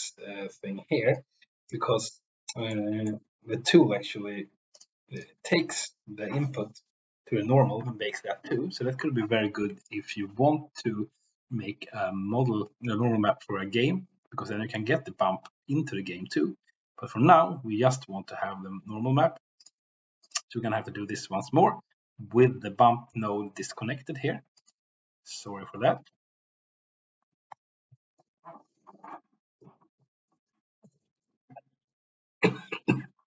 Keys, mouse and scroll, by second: 1.1-1.8 drag, 2.6 middle click, 9.7 shift+click, 19.5 click.